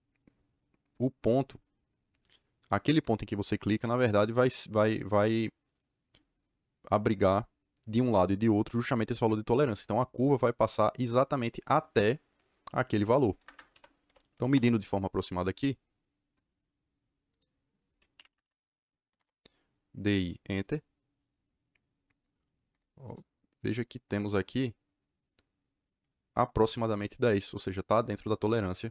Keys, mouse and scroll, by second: 13.3 Escape, 13.4 Escape, 13.7 d, 14.0 i, 14.5 Return, 17.2 click, 18.1 Escape, 18.2 Escape, 19.1 Return, 20.6 click, 22.0 click, 22.6 Return, 23.0 click, 24.3 click.